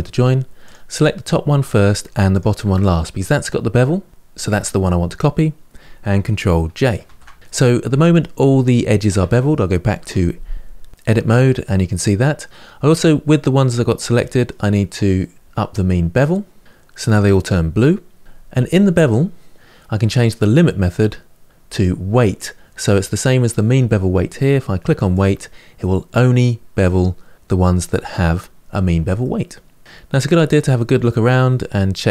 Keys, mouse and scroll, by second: 0.4 click, 2.1 shift+click, 6.8 ctrl+j, 7.4-9.8 middle drag, 9.8 Tab, 14.0-15.3 middle drag, 15.3-16.8 drag, 17.2-19.0 middle drag, 24.9 click, 25.6-27.8 middle drag, 29.0 middle click, 30.0-30.5 scroll up 2, 30.5-32.1 middle drag.